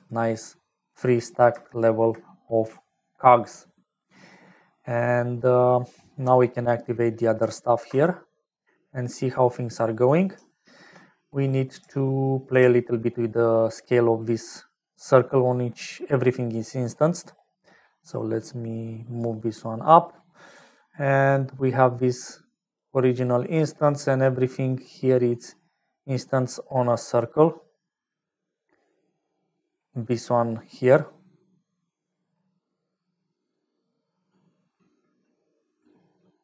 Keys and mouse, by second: 6.5 middle click, 7.5 ctrl+alt+click, 8.7-9.9 middle drag, 10.4 shift+middle click, 13.4 middle click, 14.2 middle click, 15.3 middle click, 16.2 middle click, 17.0 middle click, 18.1-19.1 drag, 19.5 click, 21.7-23.1 drag, 23.2 click, 23.9 click, 25.2 click, 26.8 click.